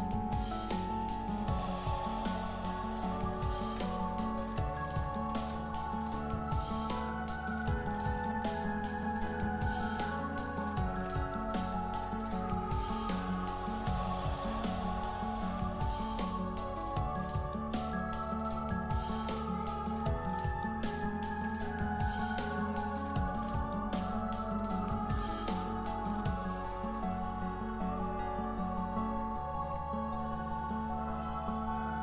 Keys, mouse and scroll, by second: 2.1-2.9 scroll up 1, 2.9 click, 3.6 ctrl+z, 4.1 click, 5.1 Tab, 6.4 Tab, 7.8 Tab, 8.6-9.4 scroll up 1, 9.8 scroll down 1, 9.9 alt+click, 14.3 scroll down 1, 14.8 alt+click, 14.9-15.3 scroll up 1, 15.3 scroll down 1, 15.7-18.1 alt+drag, 18.1-19.3 scroll up 1, 19.3 scroll down 1, 20.0 alt+click, 20.9-32.0 shift+drag.